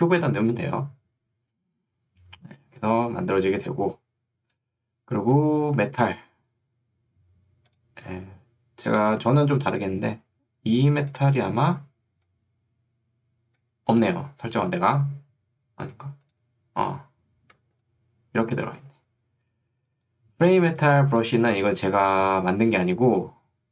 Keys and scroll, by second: 17.7 ctrl+2, 18.7 Escape.